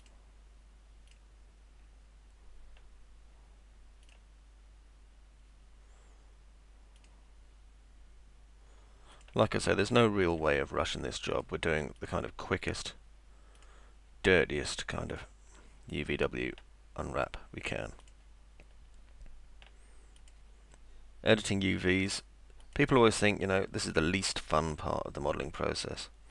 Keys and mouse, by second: 0.0 ctrl+click, 1.1 ctrl+click, 4.1 ctrl+click, 7.0 ctrl+click, 9.2 ctrl+click, 10.2 ctrl+click, 11.3 ctrl+click, 12.0 ctrl+click, 13.6 ctrl+click, 15.1 ctrl+click, 18.0 ctrl+click, 20.2 ctrl+click, 22.6 ctrl+click, 24.7 click.